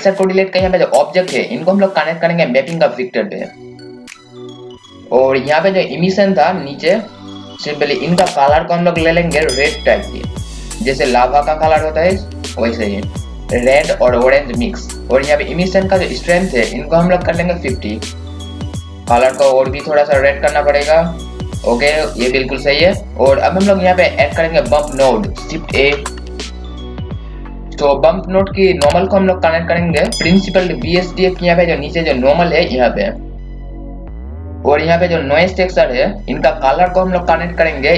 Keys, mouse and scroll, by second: 7.8 scroll up 1, 8.7-15.0 drag, 18.2 KP_5, 18.9 click, 23.3-24.0 scroll down 1, 24.6-25.7 scroll up 2, 25.8-27.3 typing, 26.1 click, 27.1 click, 29.4-30.1 scroll up 1, 30.8-33.9 drag, 34.3 scroll down 1, 34.5 scroll up 1, 37.5 scroll down 1.